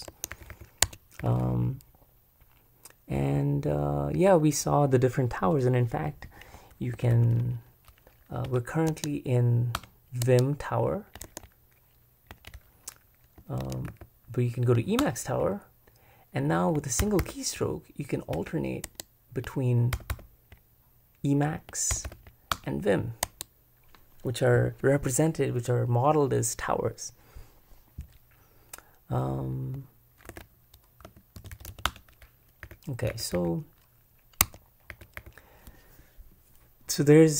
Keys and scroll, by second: 0.1 Escape, 0.3-1.5 typing, 3.2 k, 7.0 super+b, 7.1 super+b, 8.5 Return, 9.7 Return, 11.2 super+Escape, 13.6 ctrl+Escape, 15.0 super+Return, 17.0 super+m, 17.2 super+m, 18.4 Return, 18.8 Escape, 19.9 super+m, 20.1 super+m, 21.9 super+m, 22.1 super+m, 22.5 Return, 23.3 Escape, 30.3 super+b, 30.8-33.6 typing, 34.4 Tab, 34.9 j.